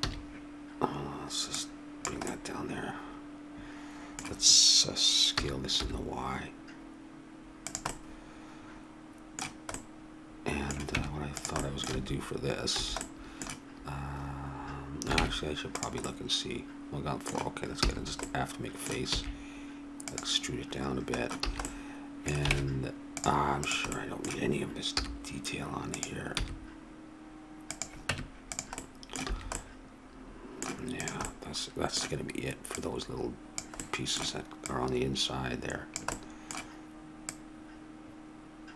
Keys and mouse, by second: 0.0 a, 1.5 right click, 2.2-3.6 drag, 5.3 s, 7.9 click, 11.0 Tab, 11.9 a, 13.0 a, 15.2 ctrl+Tab, 17.8 f, 19.1 e, 21.4 a, 22.5 ctrl+Tab, 23.6-24.9 right drag, 24.9 i, 26.3 e, 28.1 Tab, 29.3 a, 31.0-32.9 right drag, 33.8 click, 34.6-35.9 drag, 36.1-37.8 drag.